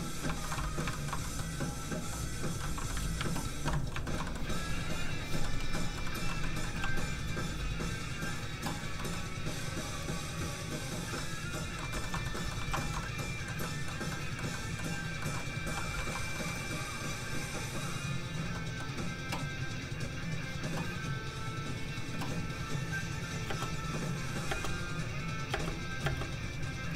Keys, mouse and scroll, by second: 0.4 shift+middle click, 0.8 middle click, 0.9 shift+middle click, 1.2 middle click, 1.3 middle click, 2.4 click, 3.9 shift+Tab, 4.0 shift+middle click, 4.2 middle click, 4.3 middle click, 5.1 click, 5.4 middle click, 5.9 shift+middle click, 6.8 shift+f, 6.9 click, 7.4 f, 8.1 click, 9.0 middle click, 10.0 click, 11.1 middle click, 11.9 shift+middle click, 12.6 alt+shift+z, 12.8 shift+middle click, 15.0 shift+scroll down 1, 15.2 middle click, 15.6 f, 15.7 click, 16.0 shift+middle click, 16.3 middle click, 16.3-16.6 scroll up 1, 17.3 click, 18.5 middle click, 20.0 click, 23.5 middle click, 23.5 space, 25.1 click, 25.5 space, 26.8 click.